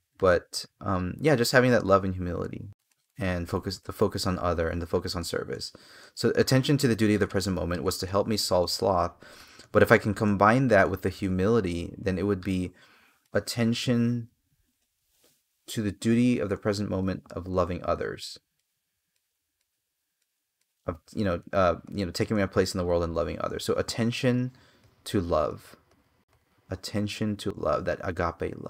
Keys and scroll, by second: 2.7 space, 13.0 space.